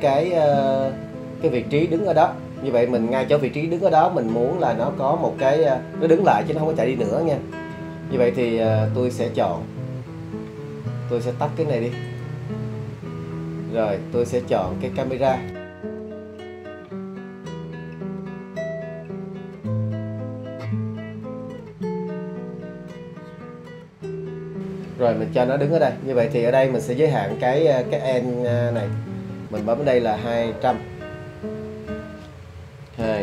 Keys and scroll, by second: 33.0 2.